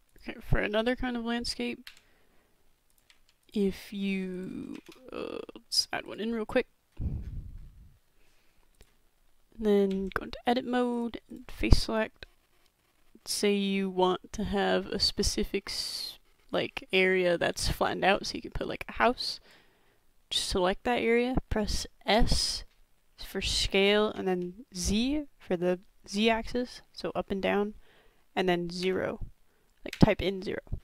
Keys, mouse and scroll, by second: 1.9 Delete, 3.1 Delete, 3.6 Delete, 4.3 click, 4.7 shift+a, 9.9 Tab, 10.9 click, 12.2 click, 12.3-14.1 middle drag, 14.3 middle click, 14.9 b, 15.0-17.0 middle drag, 17.7-18.1 shift+middle drag, 18.6-19.5 drag, 22.1 s.